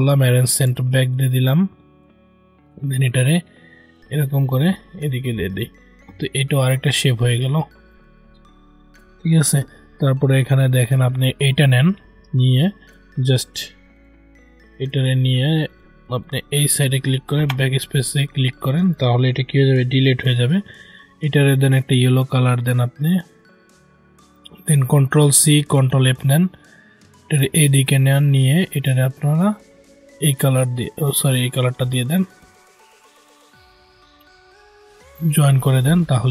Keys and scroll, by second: 25.5 ctrl+c, 25.8 ctrl+f.